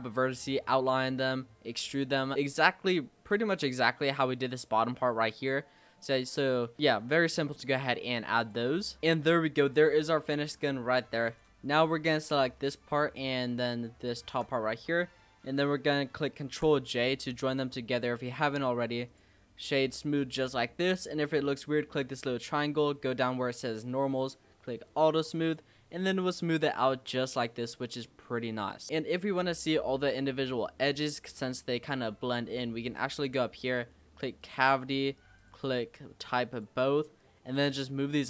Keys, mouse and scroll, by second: 2.5-2.8 scroll down 2, 2.8 shift+scroll up 1, 2.9-3.4 shift+middle drag, 3.4-4.8 scroll up 3, 4.8-5.3 scroll down 3, 5.3-8.4 shift+middle drag, 8.4 click, 8.9 Tab, 9.0-9.8 middle drag, 9.8 scroll down 2, 10.1-11.3 middle drag, 11.3 click, 11.6-12.2 scroll up 3, 12.2-13.1 middle drag, 13.1-14.0 scroll down 1, 14.0 shift+click, 14.5-16.4 middle drag, 16.4 ctrl+j, 17.4 click, 18.0 click, 18.4-20.2 right drag, 20.2-21.9 middle drag, 21.9 click, 23.5-24.9 scroll down 1, 24.9 click, 25.4 click, 25.9-31.3 middle drag, 33.0-36.1 drag.